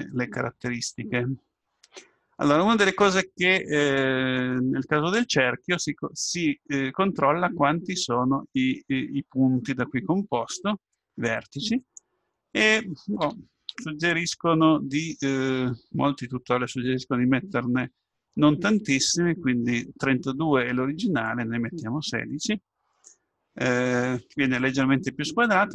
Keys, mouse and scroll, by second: 11.8-13.7 drag, 14.8-16.8 scroll down 1, 16.8-17.3 scroll down 1, 17.3-17.9 scroll down 1, 17.9-19.0 scroll up 1.